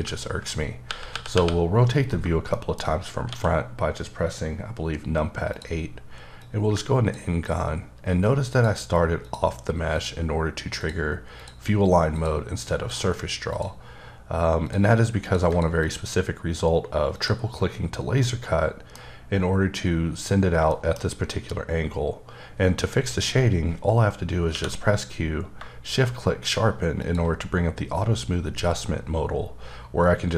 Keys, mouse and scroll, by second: 0.9 KP_8, 1.1 KP_8, 1.3 KP_8, 2.5 middle click, 2.7 shift+scroll down 1, 2.8-3.2 shift+scroll up 2, 3.2 d, 5.5 click, 6.4 click, 8.5 click, 9.2 ctrl+double click, 9.9 click, 10.8 click, 12.1 ctrl+click, 12.9 ctrl+click, 13.5 ctrl+double click, 14.6 ctrl+click, 15.2 ctrl+click, 15.5 ctrl+double click, 15.8 click, 17.1 click, 18.2 middle click, 21.2-21.6 scroll up 2, 25.5 q, 27.0 shift+click, 27.9-28.4 scroll down 2, 28.4-29.3 scroll up 2, 29.3-30.3 scroll down 9.